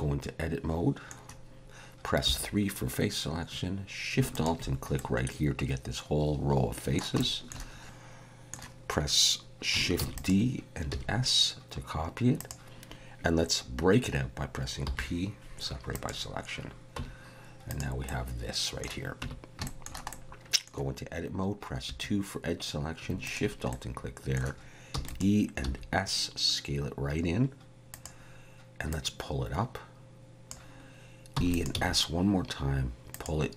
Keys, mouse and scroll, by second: 2.2 3, 4.4 alt+shift+click, 5.0 middle click, 7.2 shift+middle click, 7.8 ctrl+z, 10.0 shift+d, 10.9 s, 14.8 p, 17.0 Tab, 17.7 click, 18.0 middle click, 19.2 Tab, 19.6 shift+middle click, 20.1 middle click, 21.9 2, 23.4 alt+shift+click, 23.7 middle click, 24.9 e, 25.6 s, 28.9 click, 31.3 e, 31.7 s.